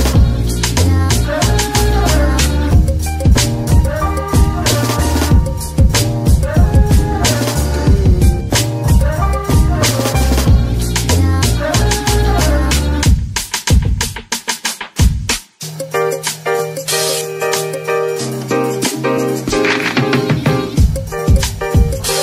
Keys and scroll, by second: 12.6 Tab, 21.9 r, 22.1 x.